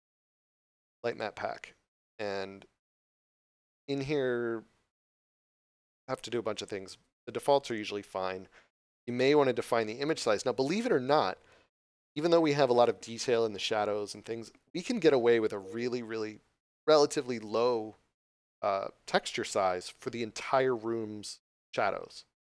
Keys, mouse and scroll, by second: 1.0 click, 8.9 click.